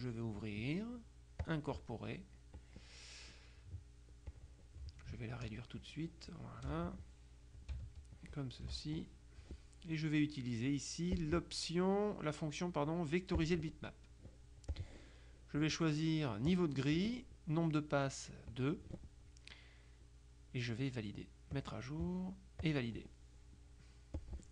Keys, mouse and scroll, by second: 1.5 click, 2.6 click, 4.4 click, 5.4-7.2 ctrl+drag, 8.2-9.2 ctrl+drag, 11.3 click, 13.4 click, 14.8 click, 16.6 click, 18.6 click, 21.6 click, 22.7 click, 24.3 click.